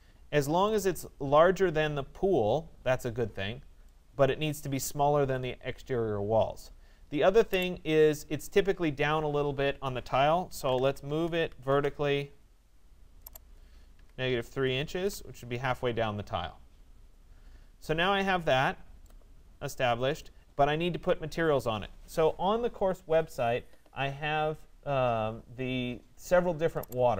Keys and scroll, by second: 10.7 Return, 14.0 -, 14.4 3, 15.0 Return.